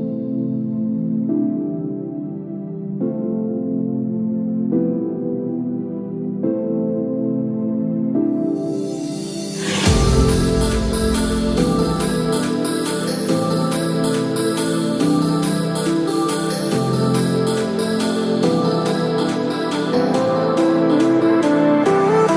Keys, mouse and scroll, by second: 2.9 middle click, 3.4 click, 3.9 shift+click, 6.6 middle click, 9.8 ctrl+click, 10.4-11.0 scroll down 1, 11.0 scroll down 1, 11.8 scroll down 4, 12.1 middle click, 12.9 scroll down 1, 13.2 middle click, 13.7 scroll up 2, 16.4 shift+d, 19.6 click.